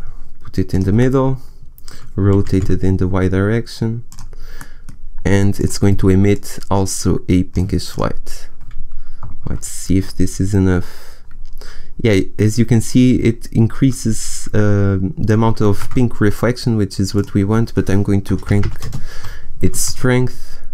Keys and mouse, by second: 0.7 click, 0.9-1.9 middle drag, 2.2 r, 9.3 shift+z, 16.5 shift+z, 18.5 shift+z, 18.9 0, 19.7 0, 19.7 shift+z.